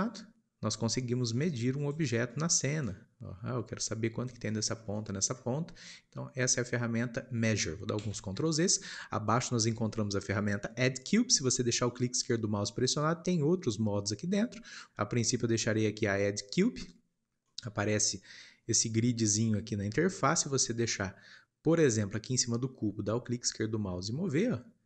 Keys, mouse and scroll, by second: 0.1 click, 2.8-4.6 ctrl+drag, 4.6 scroll down 2, 4.9-5.6 middle drag, 5.6 scroll up 2, 7.9 ctrl+z, 16.7-17.4 drag, 17.4-23.6 shift+middle drag, 23.6 click.